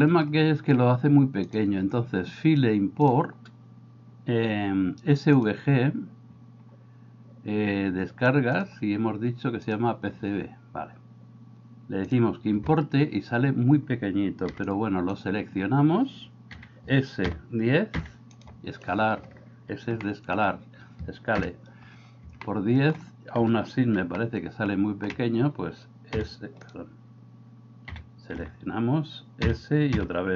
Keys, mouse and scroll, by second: 1.5-5.7 drag, 14.6 b, 16.5 s, 20.1 middle click, 21.5 KP_0, 22.5 middle click, 24.2-25.0 shift+middle drag, 26.3 a, 28.0 s, 28.4 a.